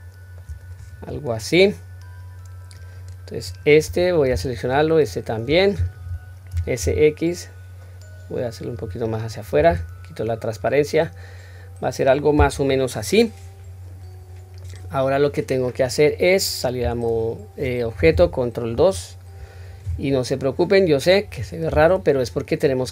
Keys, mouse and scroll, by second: 2.8-3.5 drag, 4.5 shift+click, 6.5 s, 10.2-10.7 scroll down 2, 10.7-12.7 middle drag, 13.2-14.8 middle drag, 15.1-16.2 scroll up 1, 16.8 Tab, 18.8 ctrl+2, 21.7 Tab, 22.3-22.8 scroll up 1, 22.8-22.9 middle drag, 22.8-22.9 scroll up 1.